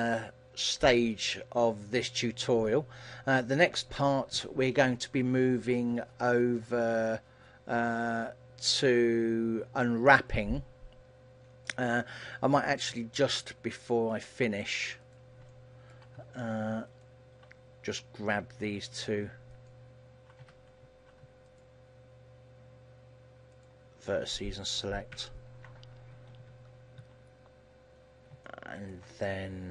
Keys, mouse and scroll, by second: 10.7 middle click, 12.2-13.1 scroll up 7, 13.1 Tab, 13.7 middle click, 15.3 right click, 15.7 shift+middle click, 17.1 shift+right click, 19.9 alt+right click, 20.6 a, 21.7 shift+right click, 23.8 shift+right click, 25.3 ctrl+l, 26.5 KP_3, 26.9 KP_1, 27.1 KP_3, 28.2-28.7 scroll down 3, 28.7 shift+middle click.